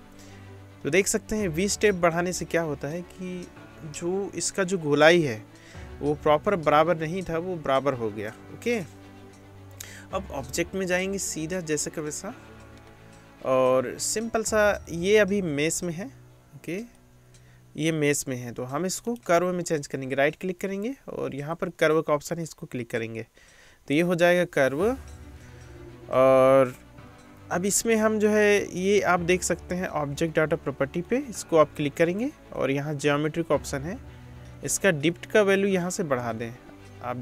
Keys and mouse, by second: 11.0-14.9 drag, 14.9 middle click, 15.0-15.8 drag, 15.8 middle click, 15.9-17.1 drag, 17.1 middle click, 17.2-30.4 drag, 30.4 middle click, 30.6 click, 31.1 middle click, 31.3-37.2 drag, 32.6-37.2 middle drag, 32.6-37.2 right drag.